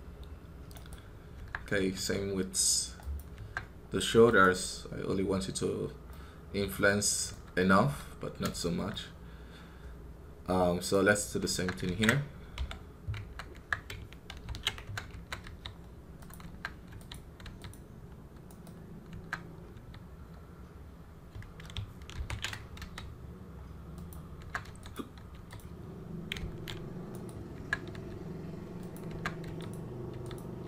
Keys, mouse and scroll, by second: 0.8 right click, 3.0 q, 3.3 Tab, 6.0-7.7 middle drag, 7.7 KP_1, 8.5-11.5 shift+middle drag, 13.4 Tab, 14.2 ctrl+i, 17.0 q, 24.0 q, 29.6 q.